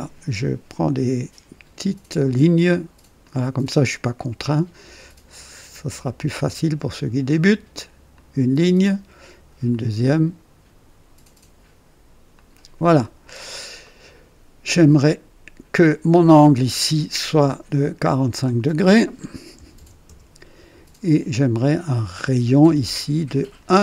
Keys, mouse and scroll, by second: 3.1 click, 8.0 click, 9.6 click, 12.3 click, 12.9 right click, 13.8 right click, 15.0 click, 16.2 click, 18.3 click, 19.5 KP_4, 19.7 KP_5, 19.7 KP_5, 20.0 Return, 20.1 KP_Enter, 23.3 click.